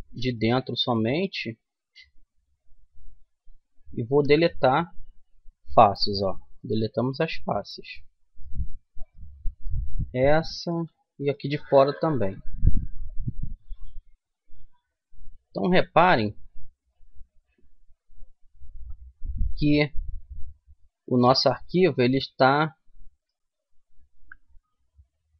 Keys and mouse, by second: 0.4-2.5 middle drag, 2.6-4.4 right drag, 4.0 Delete, 6.4-8.7 middle drag, 8.7-10.2 right drag, 9.8 middle click, 12.0 Delete, 13.2 middle click, 15.4 middle click, 21.3-23.2 middle drag, 23.9 KP_3.